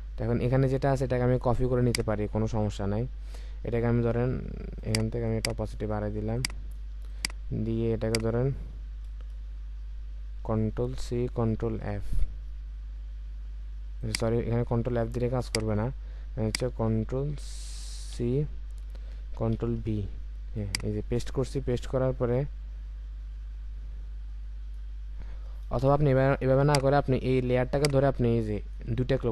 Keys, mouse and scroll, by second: 5.3 double click, 11.6 ctrl+f, 18.1 ctrl+c, 25.8 Delete, 27.1 Delete, 27.8 alt+click.